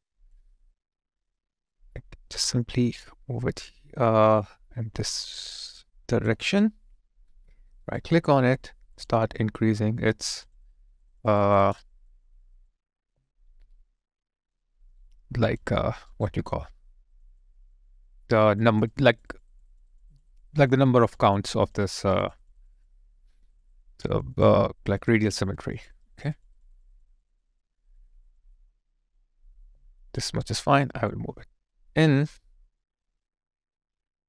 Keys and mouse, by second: 7.8 right click, 9.1 double click, 13.1 alt+right click, 13.7 alt+click, 14.8 alt+right click, 15.1 alt+click, 16.1 right click, 17.3 double click, 29.6 alt+click.